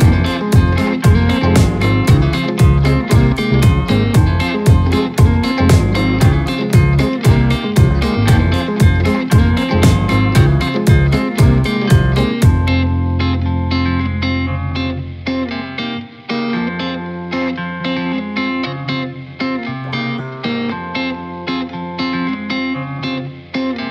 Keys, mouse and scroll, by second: 1.2 click, 1.5 scroll down 2, 1.7-2.2 middle drag, 2.2 scroll down 1, 2.4-2.7 middle drag, 2.7-3.1 scroll up 3, 3.4 shift+middle click, 4.2 click, 5.9 click, 6.2-7.4 drag, 7.4 Tab, 7.6-8.4 scroll down 1, 8.4 alt+z, 8.6 click, 9.6-9.9 scroll up 1, 9.9 scroll down 1, 10.6-11.3 scroll up 1, 11.3 ctrl+b, 13.9-14.3 scroll up 2, 14.3 middle click, 15.1 scroll up 1, 15.4 shift+middle click, 16.2-16.6 scroll up 1, 16.6-17.1 scroll down 1, 17.1-17.4 scroll up 1, 17.4 shift+middle click, 18.0 scroll down 1, 18.4-20.4 shift+middle drag, 20.4 click.